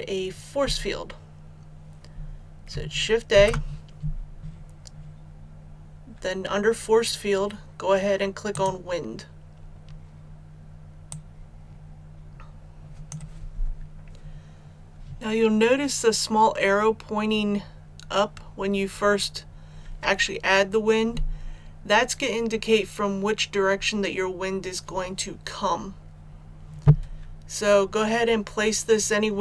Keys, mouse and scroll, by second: 3.2 shift+a, 8.4-13.5 drag, 14.0 scroll up 1.